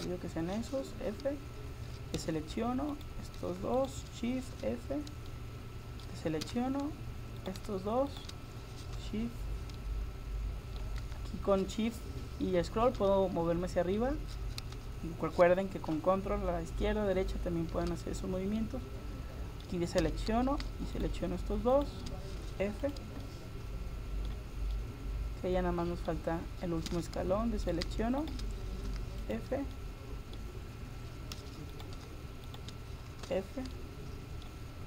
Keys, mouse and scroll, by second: 1.4 f, 2.2 a, 2.9-4.1 right drag, 4.1-5.5 drag, 4.6 f, 6.5 a, 7.4 right click, 9.0 f, 17.5-20.0 middle drag, 20.0 a, 21.0-23.6 right drag, 22.5 f, 22.9-24.5 drag, 26.1 middle click, 26.9 a, 27.7-30.0 right drag, 28.9 f, 29.3-31.2 drag, 29.7 middle click, 31.2 middle click, 31.4 a, 31.7-34.1 right drag, 33.3 f, 33.8 middle click.